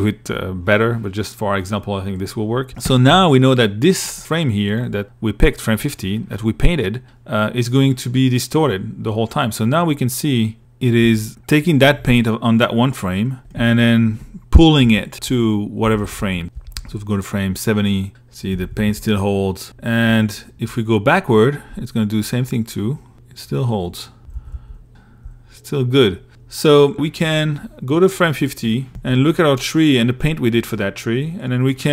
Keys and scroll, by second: 2.3 i, 9.7 i, 10.2 2, 11.0 i, 12.8 l, 14.0 Right, 15.7 Right, 17.7 Right, 18.8 Left, 22.3 Left, 23.3 Left, 24.0 Left, 26.0 a, 28.1 l, 31.5 p.